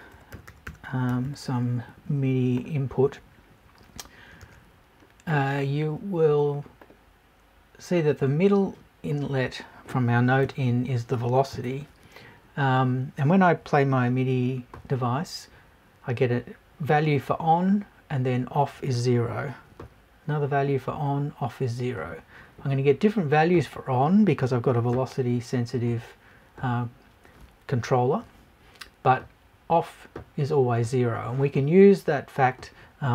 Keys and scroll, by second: 10.4 Right, 12.5 Right.